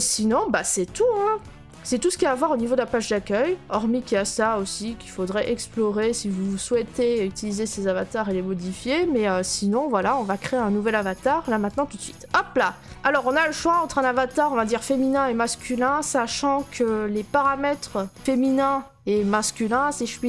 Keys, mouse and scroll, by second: 0.0 click, 0.6 click, 2.4-3.2 middle click, 2.5 middle click, 3.1 middle click, 3.1 middle click, 8.5-9.4 scroll, 11.7 click, 12.9 click.